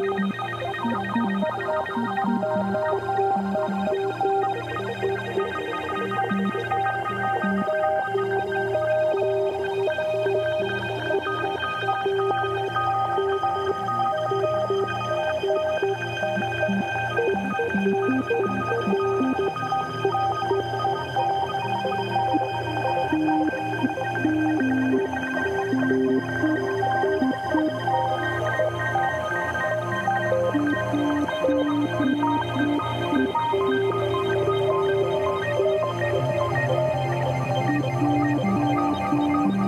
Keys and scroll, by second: 0.1 super+b, 6.2 Return, 7.0 super+Return, 7.2 super+l, 13.7 Return, 27.9 super+i, 30.0 b, 32.4 5, 33.2 [, 35.0 [, 35.8 x, 37.1 space, 38.0 space.